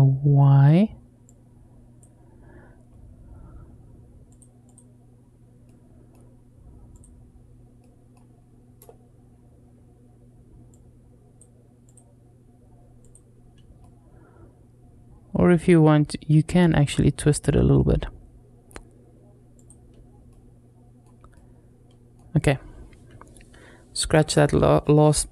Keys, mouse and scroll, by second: 0.2 middle click, 1.1 click, 4.1 click, 4.5 click, 5.5-6.0 middle drag, 6.7 click, 7.6 middle click, 10.5 click, 11.7 click, 12.8 click, 13.6-17.0 middle drag, 17.6-18.6 middle drag, 19.4 click, 20.1-20.9 middle drag, 21.2-22.0 middle drag.